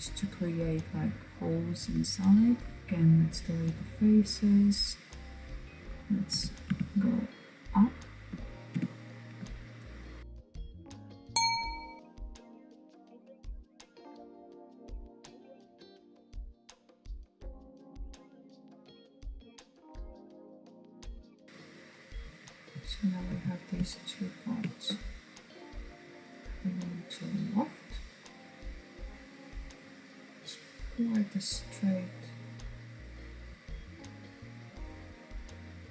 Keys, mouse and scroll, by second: 2.1 Delete, 3.2 click, 5.3 g, 7.6-8.0 scroll down 3, 8.0 middle click, 8.2 Tab, 8.9 click, 9.7 click, 10.3 click, 10.7 KP_1, 11.3 r, 12.7 click, 12.9 click, 13.3 g, 13.7 KP_1, 14.3 r, 15.7 g, 16.9 r, 18.4 click, 19.1 click, 19.6-21.9 middle drag, 21.9 alt+click, 23.2 alt+shift+click, 26.2 click, 27.2-30.2 middle drag, 31.3-35.9 drag.